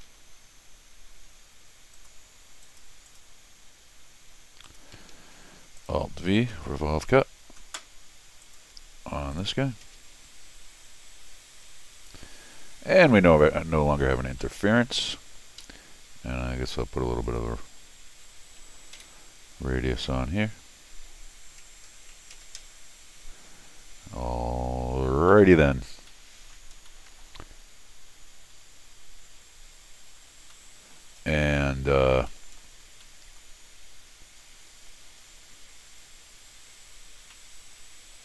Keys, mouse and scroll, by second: 0.0 l, 1.9 click, 2.6 click, 3.1 click, 4.6 click, 4.7 Escape, 4.7 Tab, 5.1 Escape, 5.8 click, 6.5 alt+v, 8.4 click, 9.3 click, 11.7-12.2 scroll down 2, 12.2-12.5 scroll up 4, 13.1 middle click, 13.7-14.4 scroll down 2, 14.4 middle click, 15.6 Escape, 17.2 click, 18.9 u, 24.3 middle click, 24.3 scroll down 1, 25.1 scroll down 1, 25.3 middle click, 26.1 middle click, 26.8 scroll down 1, 26.9 middle click, 27.5 scroll up 1, 30.5 middle click, 31.3 middle click, 32.3 middle click, 32.6-33.0 scroll down 2, 33.0 middle click, 33.3 middle click, 33.7 scroll up 1, 34.9-35.2 scroll up 1, 37.3-38.2 middle drag.